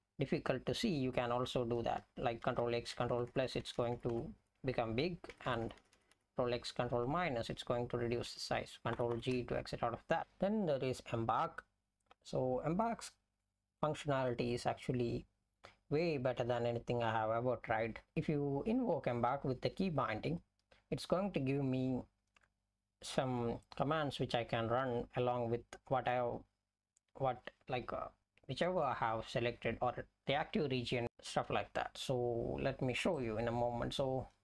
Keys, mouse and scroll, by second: 9.0 ctrl+g.